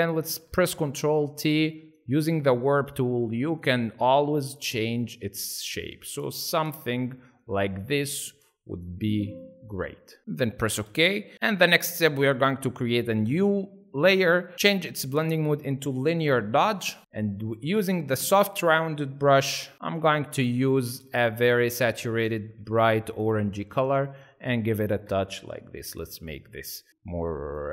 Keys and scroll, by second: 10.4 Return, 24.9 ctrl+alt+z, 25.6 ctrl+alt+z, 26.2 ctrl+alt+z.